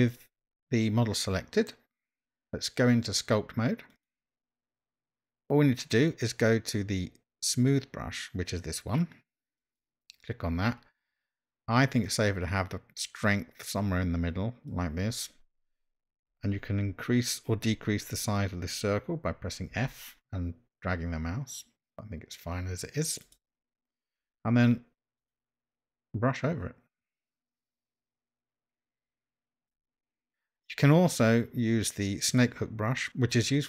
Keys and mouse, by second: 2.4-4.5 drag, 9.7 click, 12.2 click, 14.2 click, 19.8 f, 25.2-29.7 drag, 32.3 click.